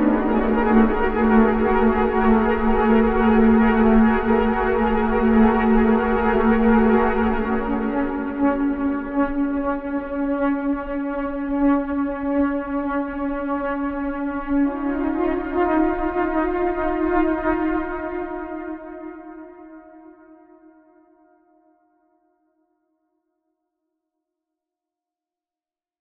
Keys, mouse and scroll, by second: 17.8-19.5 right drag, 25.0 click, 25.7 click.